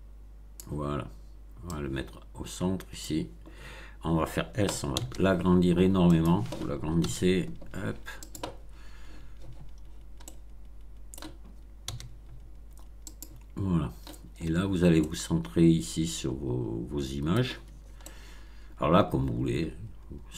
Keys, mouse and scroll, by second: 1.6-3.1 drag, 3.5-3.9 scroll down 1, 4.8 s, 6.0 click, 6.9 s, 8.1 click, 8.6 scroll down 1, 9.8-10.1 scroll down 1, 10.1-11.3 middle drag, 11.8 s, 13.0 click, 14.3-14.7 scroll up 2, 14.9-17.5 middle drag, 18.0-20.3 middle drag.